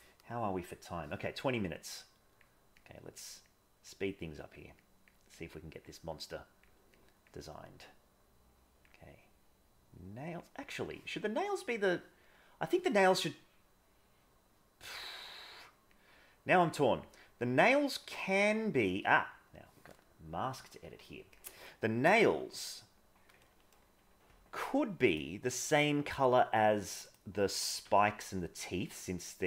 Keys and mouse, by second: 1.8 click, 2.8 click, 3.5 click, 4.1 click, 4.7 click, 5.4 click, 6.2 click, 6.9 click, 7.8-8.8 drag, 9.3-10.3 drag, 11.3-14.8 middle drag, 15.9-17.0 drag, 20.8 click, 23.5 middle click, 25.1-25.7 drag, 27.0 click, 27.8 g.